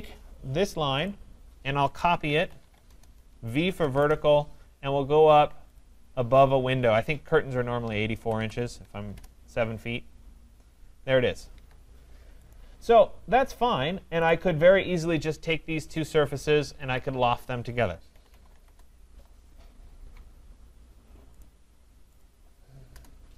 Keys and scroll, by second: 2.9 Return, 9.1 Return, 11.5 Escape, 15.6 Caps_Lock, 18.6 Return.